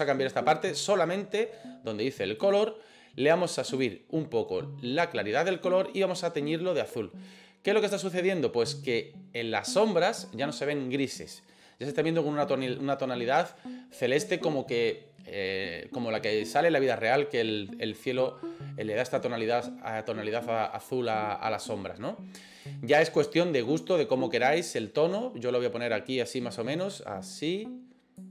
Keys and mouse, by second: 2.5 click, 9.4-9.8 drag, 22.5 click.